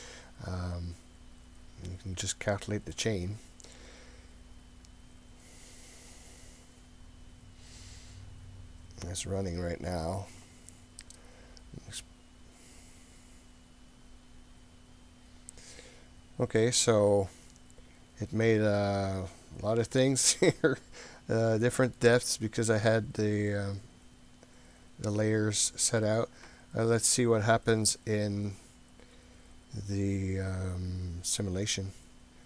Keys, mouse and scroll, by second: 0.0-0.6 scroll up 4, 3.0-14.8 drag, 16.9-22.0 middle drag, 23.5-26.1 middle drag, 29.3-30.5 scroll down 3, 30.9-31.7 scroll down 5.